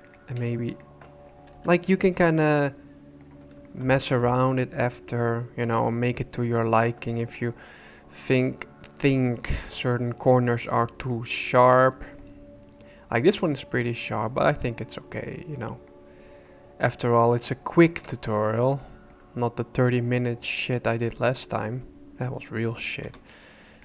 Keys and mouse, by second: 0.1 right click, 1.5 j, 2.3 alt+a, 2.7 click, 3.6 shift+click, 3.9-5.2 drag, 5.6 KP_1, 6.6 shift+click, 7.1 click, 9.6 click, 11.1 click, 11.4 middle click, 14.7 middle click, 15.8 middle click, 16.8 middle click, 18.0 KP_1, 18.8 shift+click, 18.9 shift+middle click, 23.0 b.